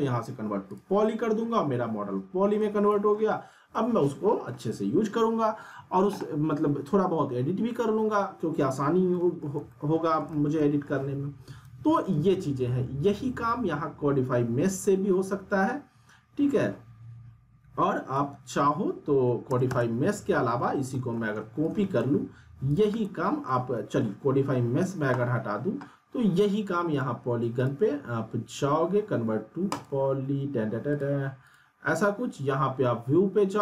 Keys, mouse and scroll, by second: 0.7 click, 2.0-2.6 scroll down 1, 2.6-3.2 alt+middle click, 3.3-3.6 scroll up 1, 3.7-4.7 alt+middle drag, 9.1 middle click, 9.7-10.9 alt+middle drag, 11.6 ctrl+z, 15.3-17.0 scroll down 2, 18.1-18.7 drag, 20.6 middle click, 20.9 alt+middle click, 21.6-22.2 shift+click, 22.9-24.1 middle click, 23.5-24.8 alt+middle drag, 24.8 click.